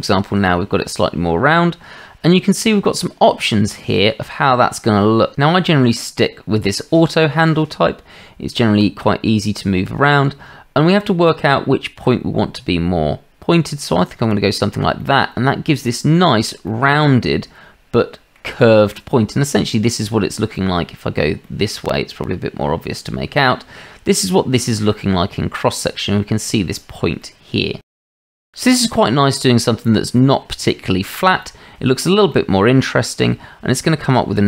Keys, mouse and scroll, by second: 8.9-9.9 drag, 11.4-14.3 drag, 15.0-15.7 drag, 15.9-16.3 shift+drag, 16.7-18.4 drag, 20.6-21.2 middle drag, 21.4-21.8 shift+middle drag, 21.9-23.5 middle drag, 27.2-28.1 drag, 30.2-30.7 drag, 31.4-31.7 shift+middle drag, 32.4-33.4 drag, 33.8-34.4 middle drag.